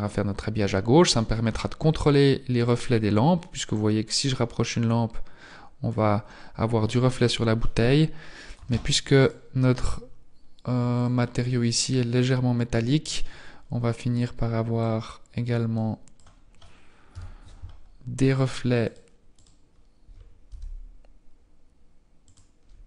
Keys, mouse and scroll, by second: 1.0-1.3 scroll down 4, 1.5 scroll down 4, 2.5 right click, 2.5-3.7 scroll down 1, 3.7 click, 9.1 right click, 15.7 click, 18.1 right click, 18.8 right click, 19.3 right click, 20.5 g.